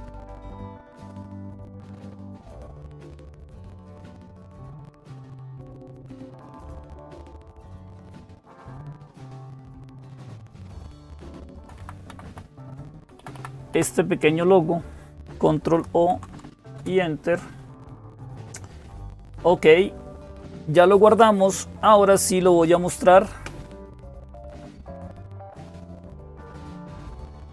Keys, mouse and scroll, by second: 0.2-1.4 right drag, 1.4 click, 2.8 click, 7.7-9.0 right drag, 9.0-10.1 drag, 10.5 Right, 11.2 Left, 11.4 Left, 11.6 Left, 11.9 Right, 12.1 Right, 12.3 Right, 12.8 Left, 13.0 Left, 13.1 Left, 13.5 Left, 15.8 ctrl+o, 16.6 Return, 24.6 click, 27.3 click.